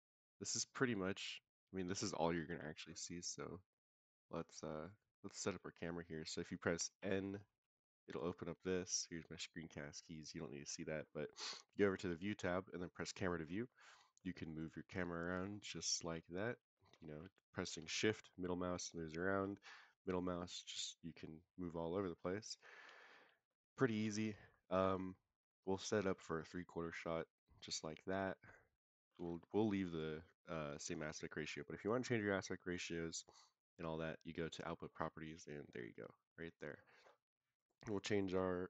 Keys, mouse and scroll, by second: 0.7-1.9 middle drag, 2.4 KP_0, 3.8 click, 4.3 click, 4.8 click, 7.0 n, 7.5 n, 9.8 click, 12.8 click, 13.6 middle click, 14.3-14.7 middle drag, 14.9 scroll up 1, 15.2 middle drag, 15.7 shift+middle drag, 16.1 shift+middle drag, 16.5 shift+middle click, 16.9 shift+middle drag, 18.1-19.3 shift+middle drag, 19.7-23.1 middle drag, 23.5-23.9 shift+middle drag, 24.1-24.5 middle drag, 24.8 middle click, 25.6 shift+scroll up 1, 25.7 shift+middle click, 26.4 scroll up 1, 26.8-29.0 shift+middle drag, 29.8 click, 34.4 click, 36.4 click, 37.5-38.6 drag.